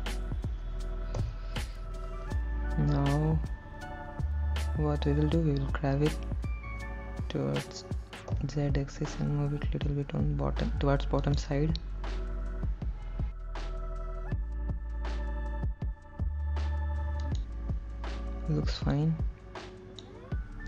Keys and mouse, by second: 1.4 ctrl+l, 6.9 g, 8.6 z, 11.5 click, 14.1 g, 14.6 z, 19.1 click.